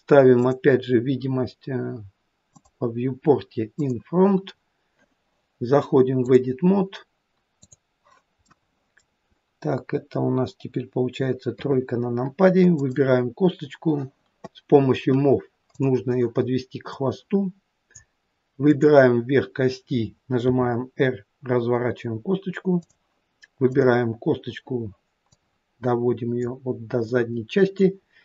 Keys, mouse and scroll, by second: 0.4 click, 2.5 click, 6.2 click, 8.6 middle click, 11.5 KP_3, 12.8 click, 15.8 click, 18.7 click, 20.5 r, 25.3 click.